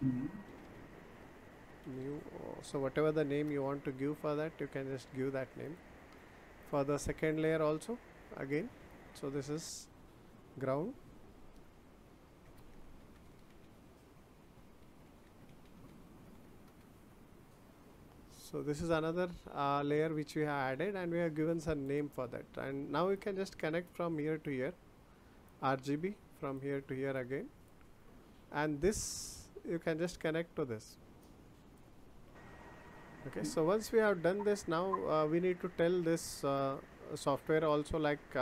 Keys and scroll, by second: 3.4 Return, 12.2-13.5 typing, 14.8 space, 15.0 g, 16.6 Return.